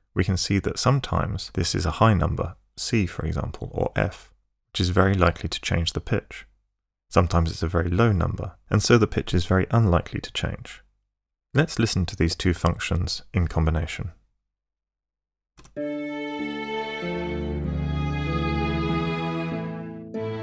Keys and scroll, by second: 14.3 Escape, 15.6 space.